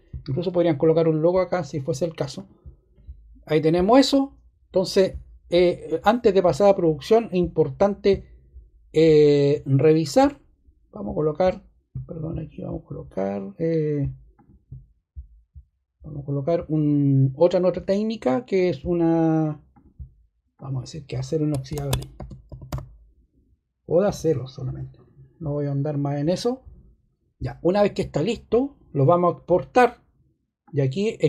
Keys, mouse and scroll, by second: 21.5-24.0 typing.